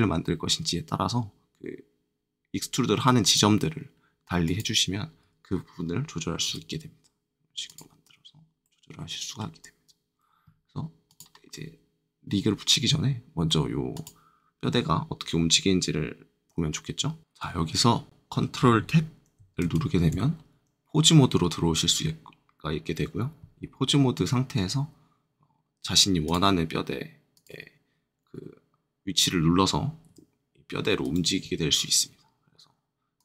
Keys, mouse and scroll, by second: 3.2 click, 4.4 click, 6.4 e, 7.6 click, 8.6 middle click, 11.0 click, 13.9 click, 19.6 ctrl+Tab, 26.2-30.0 drag, 30.0 r, 31.0-33.1 right drag, 33.1-33.2 drag.